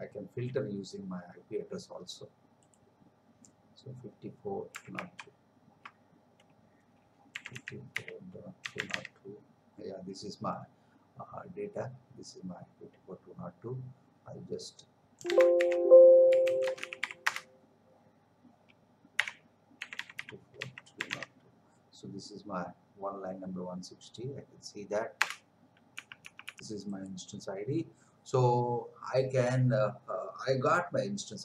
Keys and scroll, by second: 5.1 alt+Tab, 15.2 Escape, 15.6 shift+;, 16.3 s, 16.6 space, 16.8 n, 17.2 Return, 25.2 Return, 25.9 Up.